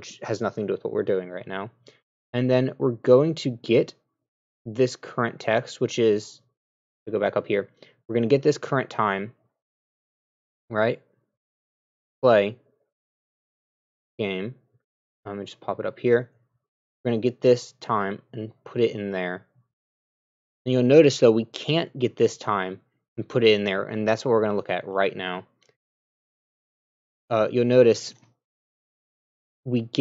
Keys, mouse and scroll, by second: 11.2 w, 14.9 click, 15.4 w, 15.8 a, 26.8 scroll down 1.